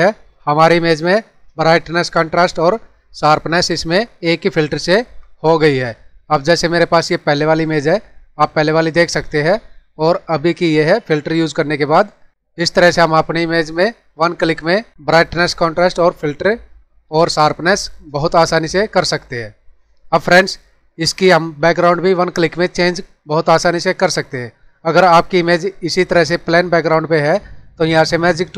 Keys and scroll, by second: 21.0 ctrl+-.